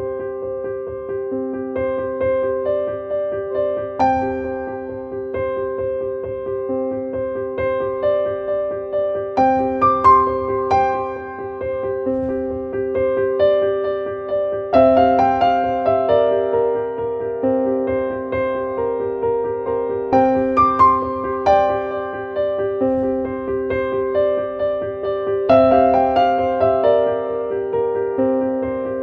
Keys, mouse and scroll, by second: 4.3 click, 5.6-8.4 drag, 10.4 click, 11.5 click, 13.3 click, 15.3-19.0 drag, 19.3 click, 20.0-21.1 scroll up 1, 21.2-23.1 drag, 23.1-23.5 scroll down 1, 24.5 scroll down 1, 24.9-25.9 scroll up 1, 26.3-27.3 scroll up 1, 28.6 click.